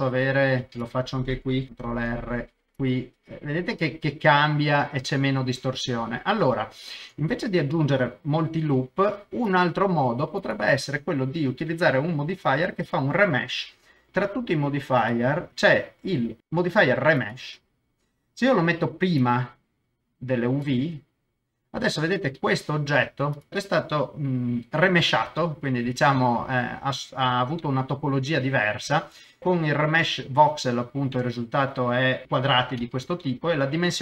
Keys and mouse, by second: 0.6 Tab, 0.7 click, 1.9 ctrl+r, 6.4 ctrl+z, 8.8 Tab, 10.4 click, 15.1-17.4 drag, 19.2-20.7 drag, 23.9 middle click, 25.3 middle click, 26.2 middle click, 27.6 middle click, 31.2 middle click, 32.2 middle click, 32.2 shift+z, 32.9 shift+z, 33.2 middle click.